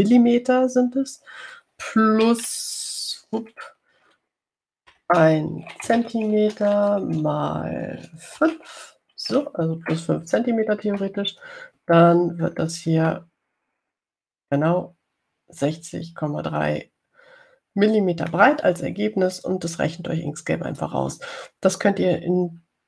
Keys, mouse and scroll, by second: 4.5 shift+8, 6.2-7.8 typing, 9.2 space, 9.7 5, 10.4 shift+9, 12.2 Return, 14.4-18.4 drag, 18.4-19.8 middle drag, 21.0-22.3 drag.